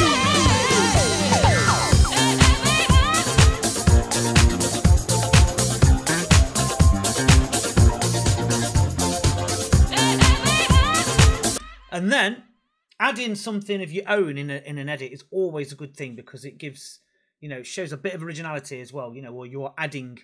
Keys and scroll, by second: 11.4 space.